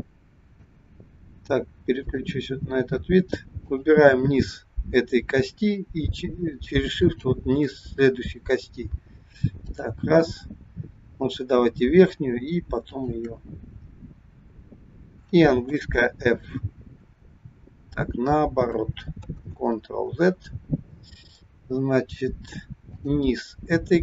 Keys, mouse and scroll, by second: 2.2 click, 3.5 click, 6.9 shift+click, 9.7 click, 12.8 shift+click, 15.6 f, 17.0-17.7 scroll down 2, 19.1 ctrl+z, 20.4-20.8 scroll up 3, 21.7-22.3 scroll down 1, 22.8 click.